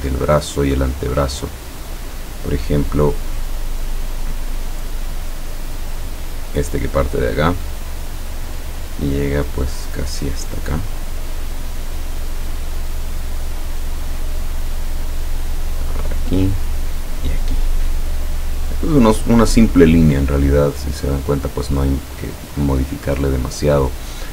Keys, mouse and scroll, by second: 6.5 click, 11.9 click, 13.3 click, 16.1 click, 17.0 click, 20.5-21.5 middle drag.